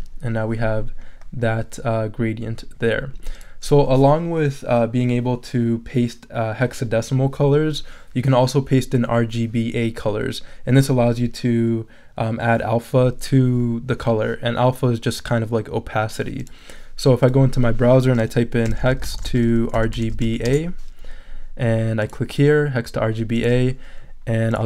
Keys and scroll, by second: 18.4-20.7 typing.